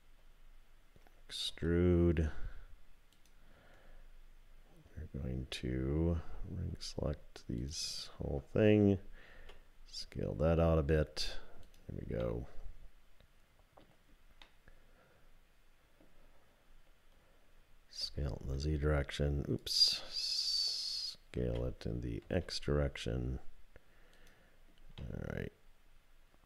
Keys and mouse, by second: 1.5 e, 9.3 s, 12.3-13.8 drag, 14.4-16.0 drag, 18.0 s, 21.4 s, 25.1-26.4 drag.